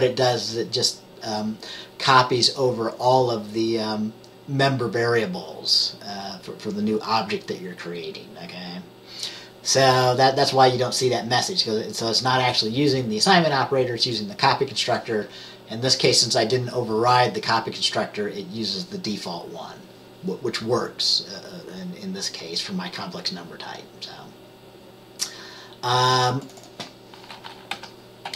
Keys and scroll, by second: 27.8 typing.